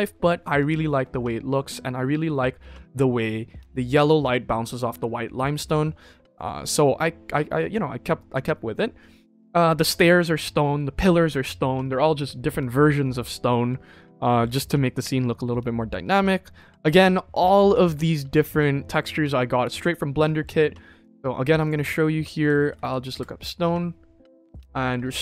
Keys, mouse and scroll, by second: 21.0 drag, 21.5-22.8 drag.